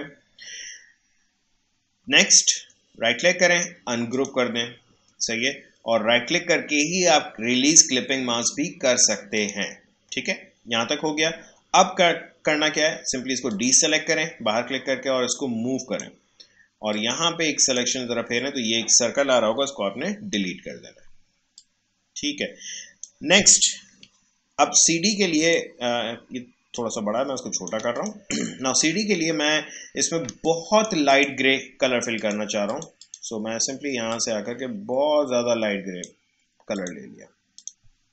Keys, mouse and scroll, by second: 2.5 right click, 4.1 click, 5.0 right click, 9.3 click, 13.5-20.1 drag, 20.3 Delete, 21.5-24.1 drag, 24.1-24.7 alt+scroll down 1, 25.1-26.7 drag, 28.5-29.8 alt+scroll up 1, 30.2 space, 30.4 click, 31.0 space, 31.1-36.7 drag.